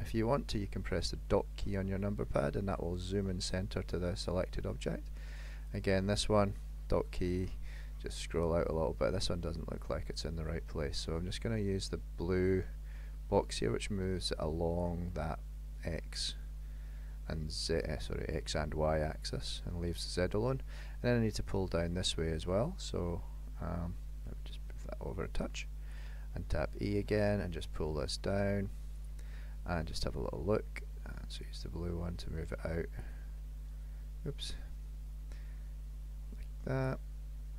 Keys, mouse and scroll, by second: 0.9 KP_Decimal, 1.7-3.1 scroll down 17, 3.1 middle click, 5.7 click, 6.7 KP_Decimal, 7.5-7.8 scroll down 6, 8.4-8.8 scroll down 9, 9.5 middle click, 11.2-11.5 scroll up 1, 12.5 click, 15.2 middle click, 21.8 middle click, 23.1-23.6 scroll down 2, 24.6 click, 27.2 e, 29.4 middle click, 31.4 click, 33.5 middle click, 34.5 click.